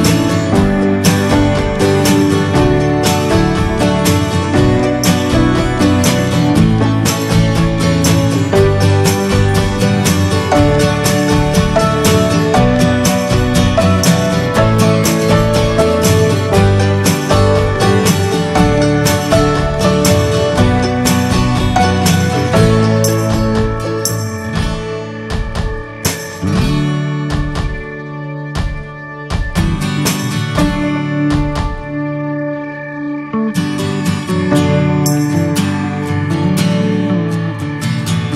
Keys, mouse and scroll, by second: 0.1 scroll down 3, 0.4 shift+middle click, 1.4 shift+middle click, 1.6-2.0 scroll up 4, 2.4-4.7 shift+middle drag, 4.7-6.4 ctrl+drag, 6.4 f, 9.4-10.5 ctrl+drag, 10.5 ctrl+z, 12.2-16.3 drag, 16.3 ctrl+z, 24.0-26.3 drag, 26.3-26.8 scroll down 7, 26.9-29.5 shift+middle drag, 30.0 middle click, 30.3 scroll up 2, 31.1 shift+middle click, 31.3-32.1 shift+scroll up 6, 31.9 shift+middle click, 34.3-38.3 drag.